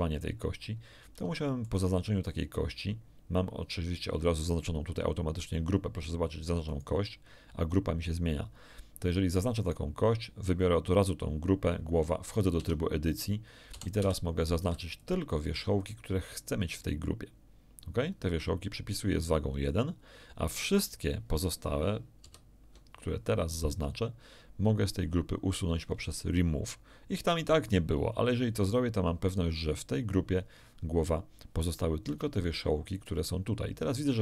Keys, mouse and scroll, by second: 0.9 scroll down 1, 1.3 shift+middle click, 6.6 right click, 9.5 right click, 12.5 Tab, 13.7 a, 13.9 z, 14.6 b, 14.9-15.9 drag, 19.5 click, 22.2 ctrl+i, 29.2 click, 32.1 Tab.